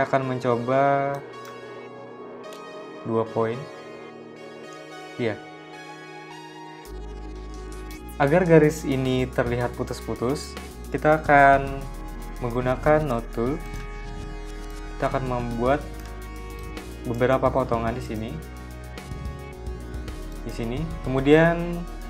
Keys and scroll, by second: 0.7 2, 1.7 Return, 15.5 z, 16.4 v, 18.1 a.